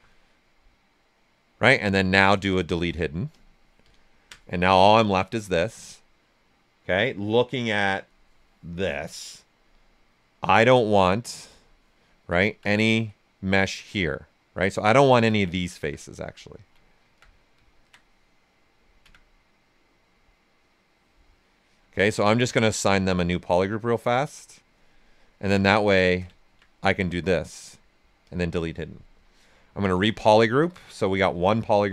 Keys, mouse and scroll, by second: 0.1-2.4 ctrl+right drag, 2.4 shift+click, 3.3 click, 3.9 alt+right click, 4.7 click, 5.6 ctrl+z, 5.9 right click, 11.4 click, 11.9 right click, 12.3 alt+right click, 14.5-16.8 alt+drag, 16.8 alt+right click, 17.8-21.9 alt+drag, 21.9 ctrl+right click, 23.1-24.9 alt+drag, 24.9 right click, 25.5 ctrl+shift+click, 26.3 alt+right click, 28.2 click, 29.6 ctrl+w, 30.3 alt+right click.